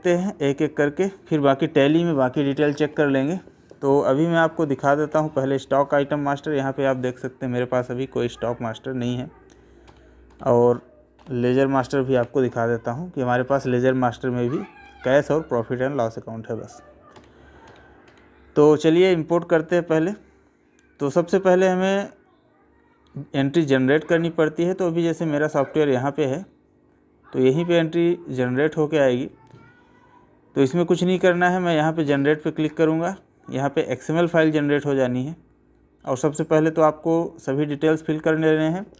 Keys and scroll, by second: 9.9 Escape, 17.1 Escape.